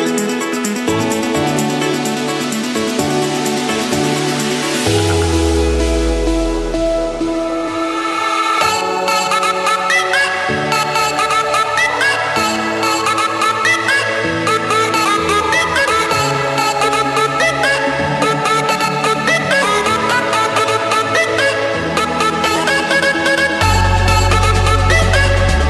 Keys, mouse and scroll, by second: 1.0-2.0 drag, 2.2 d, 2.9 Return, 4.0-4.8 typing, 5.3 Return, 6.2-6.8 typing, 7.5 Return, 8.7 Return, 9.6 Return, 10.9-11.6 scroll, 13.2 click, 14.0 click, 14.9-16.1 drag, 16.6 click, 17.6 click, 17.9-18.6 scroll, 18.6 Escape, 20.0-21.0 drag, 22.3-24.7 typing, 23.9 Return.